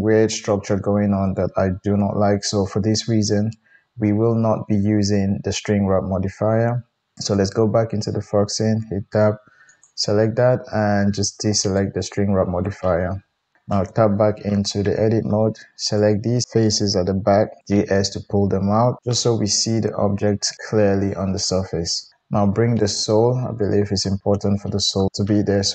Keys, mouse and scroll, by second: 7.3 click, 8.6 Tab, 9.6 click, 11.4 middle click, 11.6-19.0 drag, 13.6 Tab, 17.5 g, 19.0-23.8 middle drag, 23.8 click, 24.1-25.7 middle drag.